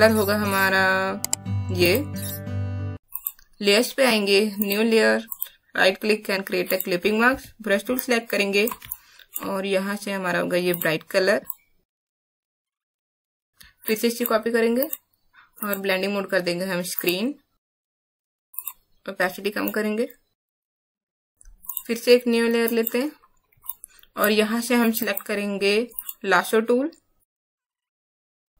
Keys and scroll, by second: 7.3 b, 8.8 alt+space, 23.6 space.